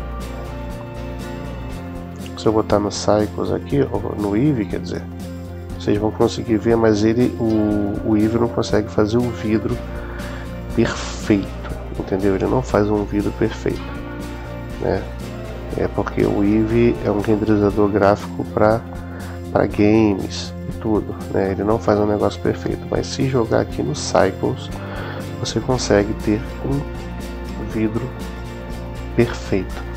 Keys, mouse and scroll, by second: 3.4-5.9 drag, 8.4-13.4 middle drag, 13.7-15.4 middle drag, 15.8-16.9 middle drag, 17.2-19.1 middle drag, 19.7-21.3 middle drag, 21.6-23.4 middle drag, 24.2-25.8 drag.